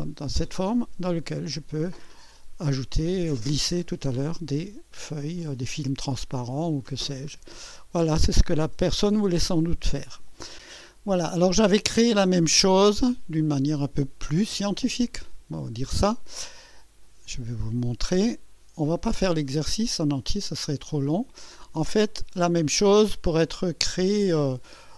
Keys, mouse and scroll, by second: 0.0 scroll up 1, 0.7 click, 1.7 click, 3.4-4.5 drag, 5.5-6.7 drag, 6.8-7.2 scroll down 1, 7.7-9.7 drag, 10.6 click, 12.9 click, 17.3-19.9 drag, 20.5-21.6 scroll down 3, 22.0-23.6 drag, 23.7 scroll up 1, 24.4-24.9 drag.